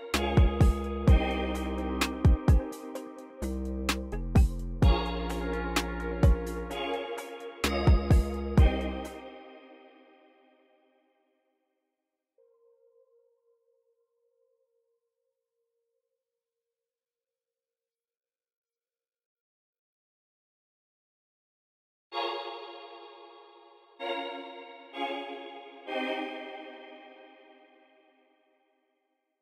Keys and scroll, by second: 1.6 ctrl+super+r, 2.2 c, 3.8 u, 5.4 u, 6.3 ctrl+super+r, 7.1 c, 8.6 space, 11.9 ctrl+super+z, 12.5 c, 13.7 super+z, 14.8 ctrl+super+z, 16.0 ctrl+super+z, 18.4 c, 19.4 c, 20.4 ctrl+super+x, 21.2 super+a, 21.6 u, 22.0 space.